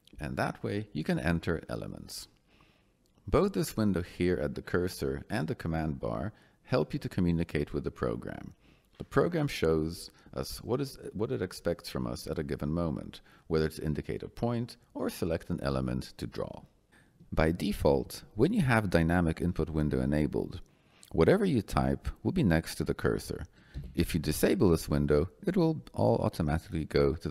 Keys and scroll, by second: 17.1 Escape, 23.7 l.